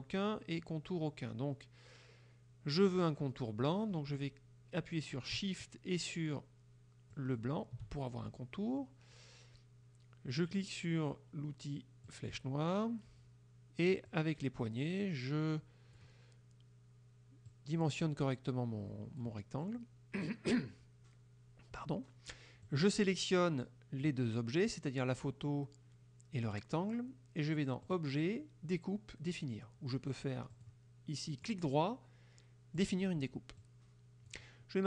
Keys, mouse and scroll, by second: 7.2 shift+click, 12.2 click, 14.2-16.2 drag, 17.5-19.4 drag, 22.7-24.3 drag, 27.9 click, 30.6 click, 31.5 right click, 32.8 click, 33.7-34.5 drag.